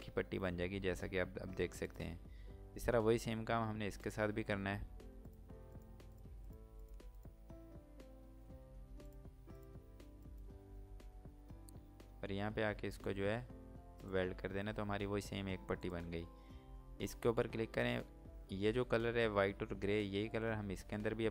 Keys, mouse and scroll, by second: 1.9 click, 5.3 click, 5.8 click, 6.2 click, 7.2 click, 7.9 scroll up 1, 8.9 click, 9.6 shift+click, 10.3 shift+click, 10.8 scroll down 1, 11.9 scroll up 1, 13.1 scroll down 1, 13.9 click.